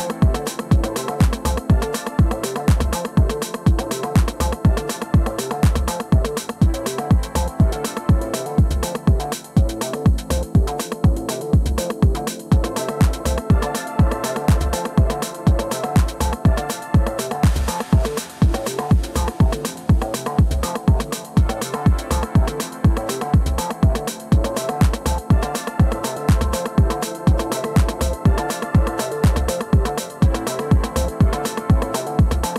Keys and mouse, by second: 0.4-1.1 alt+drag, 1.7 ctrl+z, 2.8 middle click, 3.5 middle click, 4.5 3, 5.0 click, 5.1 click, 8.4 ctrl+d, 15.2 click, 15.7-17.1 shift+drag, 19.7 alt+click, 20.6 alt+middle click, 20.9 alt+click, 22.4 alt+click, 23.1 r, 23.7 alt+click, 26.0 4, 27.4 r, 28.8 click, 29.7 click, 29.8-32.5 drag.